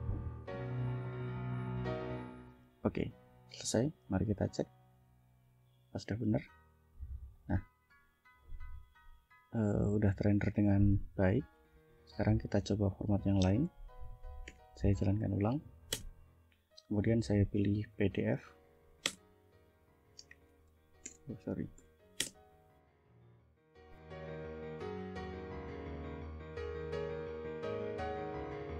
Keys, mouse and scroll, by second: 3.5 click, 4.6 click, 6.2 click, 7.4 click, 8.1 click, 8.6-9.2 ctrl+scroll down 4, 9.5 ctrl+scroll down 2, 11.7 click, 12.6 click, 13.7 ctrl+l, 14.5 Up, 16.0 Return, 17.8 2, 19.2 Return, 20.3-21.8 typing, 22.3 Return.